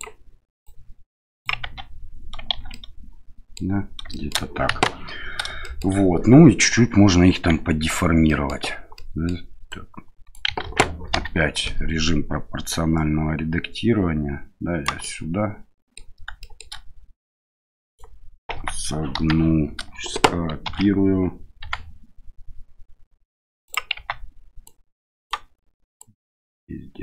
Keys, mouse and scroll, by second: 0.7 click, 1.6 Tab, 2.5 shift+z, 2.7-3.5 middle drag, 4.1 shift+middle drag, 4.7 KP_1, 5.6 shift+middle drag, 7.5 Tab, 8.2 middle click, 8.9 middle click, 9.7 right click, 10.6 ctrl+z, 11.1 o, 12.7-14.8 right drag, 15.0-16.0 middle drag, 16.5 shift+middle click, 17.2 right click, 18.5 Tab, 19.1 KP_1, 20.6 shift+d, 23.9 Tab, 24.6 right click, 26.0-27.0 right drag.